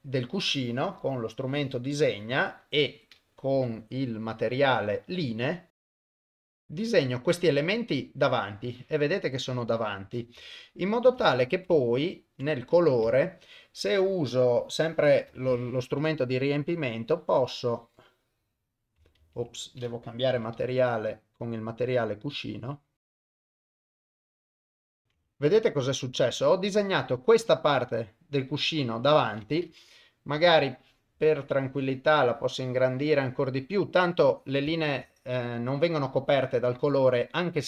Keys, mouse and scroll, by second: 0.9-1.9 drag, 1.9 middle click, 3.5 u, 5.9 click, 6.3 click, 6.4 click, 6.5 shift+middle click, 6.6 click, 7.7-9.3 middle drag, 9.5 KP_1, 10.5 ctrl+middle click, 11.3 shift+middle click, 11.9 ctrl+middle click, 12.8 click, 13.1 shift+middle click, 15.4 ctrl+middle click, 16.7-18.9 drag, 19.2 ctrl+z, 20.3 u, 22.6 click, 23.3 click, 23.4 click, 23.9 shift+middle click, 24.0 click, 24.4 click, 24.7 shift+middle click, 24.8 click, 25.2-30.2 middle drag, 30.3 KP_1, 31.3-33.4 drag, 34.8 ctrl+middle click, 35.2-36.8 middle drag, 37.4 middle click.